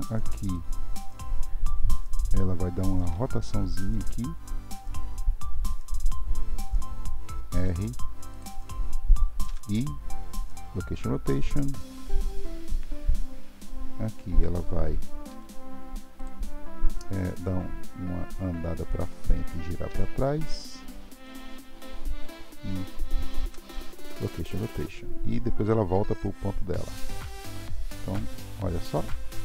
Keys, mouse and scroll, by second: 15.3 r, 25.7-28.7 drag.